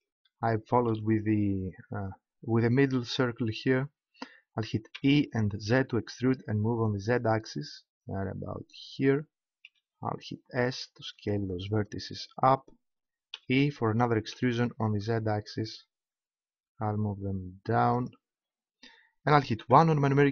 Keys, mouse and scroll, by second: 4.9 e, 8.9-10.8 drag, 9.6 s, 12.1-14.3 drag, 13.3 e, 18.1-20.1 drag, 19.6 KP_1.